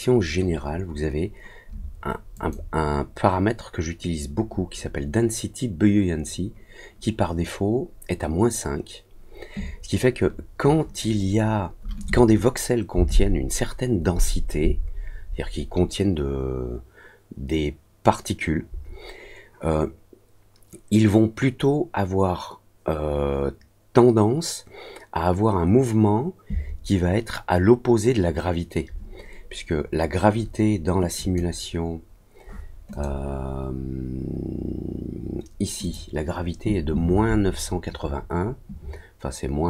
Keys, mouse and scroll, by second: 2.3 click, 31.1 click, 32.9 click, 35.8 click.